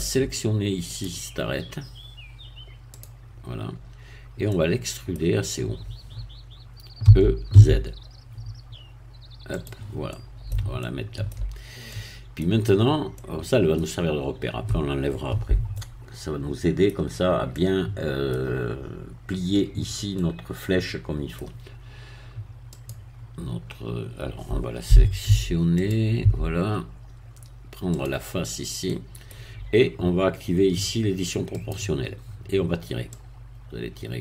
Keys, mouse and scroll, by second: 0.9 click, 3.0 click, 3.6-4.5 scroll down 1, 4.5 middle click, 7.0 e, 7.5 z, 9.6 click, 10.1-11.4 middle drag, 11.9 middle click, 12.8 scroll up 1, 13.2-14.2 middle drag, 15.8-17.0 middle drag, 17.5 middle click, 20.2-21.6 middle drag, 22.8 click, 25.3 Tab, 25.8 click, 26.2 Tab, 26.8-27.1 scroll up 1, 28.0 click, 28.4 scroll down 1, 28.9 middle click, 31.6 click, 33.2-34.2 drag.